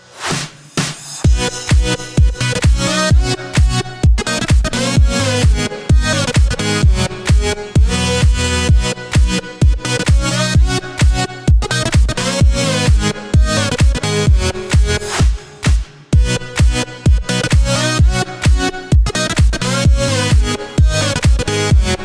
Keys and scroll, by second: 0.0-0.3 typing, 10.7 b.